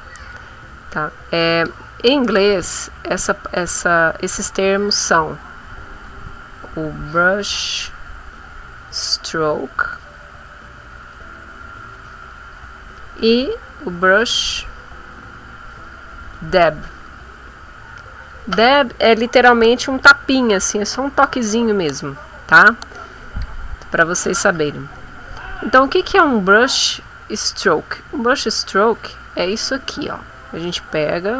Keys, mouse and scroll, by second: 1.0 click, 2.5 click, 3.8 click, 4.3 click, 5.8 click, 6.3-9.1 drag, 9.3-12.7 drag, 13.3 click, 13.8-16.5 drag, 23.1 click, 26.7 click, 27.5 click, 28.5 click, 29.2 click, 30.5 click.